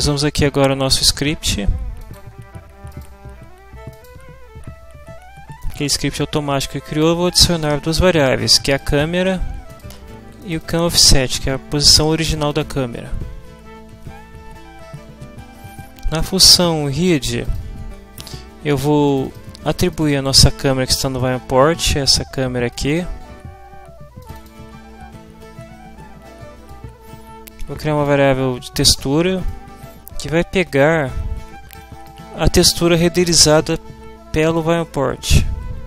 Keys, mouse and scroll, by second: 2.0 click, 2.9 click, 3.9 click, 5.6-7.2 drag, 7.3 click, 8.7 click, 9.7 click, 10.4 click, 12.5 click, 16.1 click, 17.5 click, 19.1 click, 22.7 click, 26.7-28.3 drag, 29.5-32.2 scroll up 1, 35.2 click.